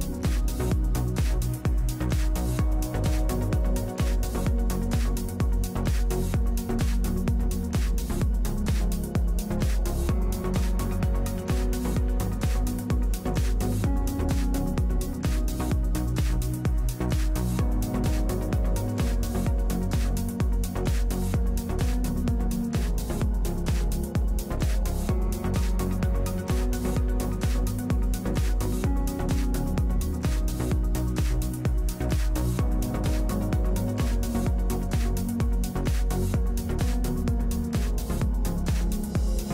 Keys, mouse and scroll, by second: 2.1 alt+f, 4.1 middle click, 7.9-9.0 middle drag, 10.2 shift+v, 11.3 q, 12.4 shift+v, 16.3 a, 17.7 shift+v, 18.0 a, 21.8 shift+v, 23.1 shift+v, 26.7 shift+v, 27.1 a, 27.7 ctrl+Tab, 33.0 KP_Decimal, 35.2 KP_Decimal, 35.3 ctrl+Tab, 36.6 ctrl+Tab, 36.8-38.5 drag, 37.8 shift+v, 38.9-39.5 drag.